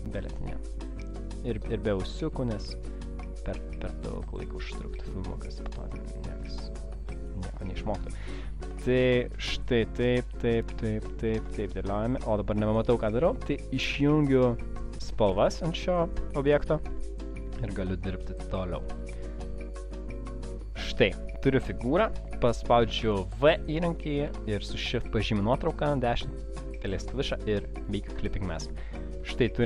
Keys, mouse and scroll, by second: 14.9 click, 16.6 click, 25.2 shift+click, 26.1 right click, 28.0 click, 28.5 space, 29.0 alt+scroll down 1, 29.5 space.